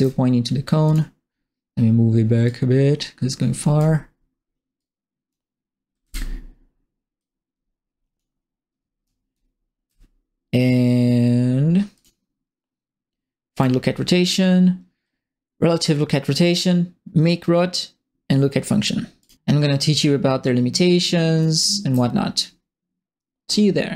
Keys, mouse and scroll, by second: 0.0-0.1 typing, 0.8 click, 2.4-3.7 drag, 4.7 click, 5.7-6.5 typing, 7.1 click, 9.0 right click, 9.0 d, 9.3 s, 11.9 click, 13.5 right click, 19.2 right click, 21.4 right click, 21.5 d.